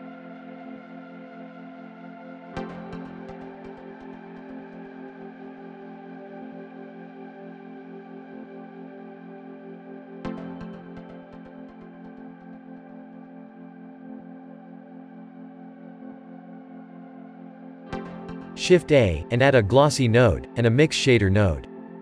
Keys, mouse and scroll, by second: 2.0 click, 2.7-7.9 shift+middle drag, 7.9-22.0 drag.